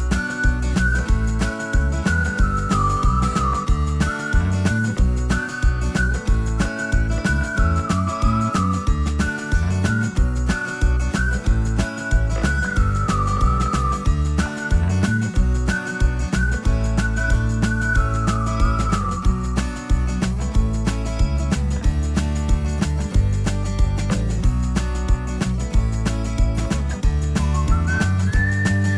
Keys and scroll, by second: 20.4-22.0 typing.